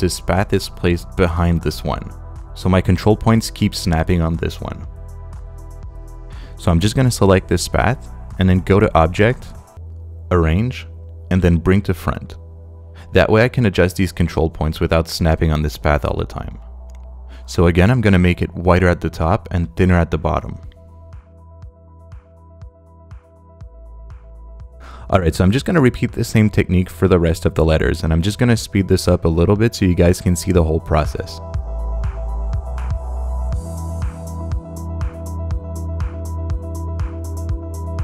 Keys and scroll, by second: 28.1 space.